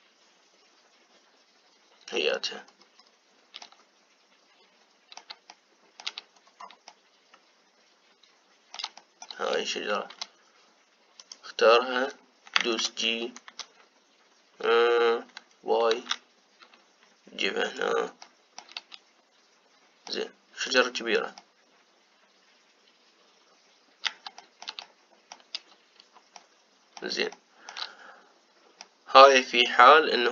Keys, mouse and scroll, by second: 3.0-4.4 scroll down 5, 4.4-7.0 middle drag, 7.0-7.6 scroll down 2, 7.6-10.2 middle drag, 10.2-11.2 scroll up 2, 11.2-11.9 scroll up 1, 11.9 click, 13.4 g, 18.9-21.4 shift+middle drag, 21.4 click, 22.1-26.4 middle drag, 26.4-27.1 scroll up 1, 27.1-30.3 middle drag.